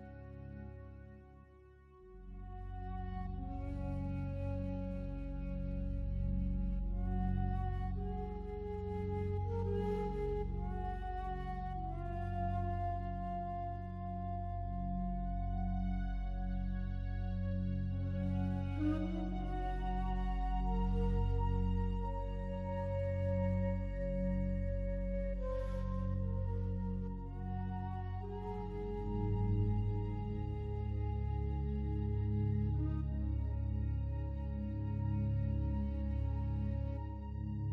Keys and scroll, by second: 8.0 ctrl+u, 23.2 ctrl+l, 37.6 ctrl+t.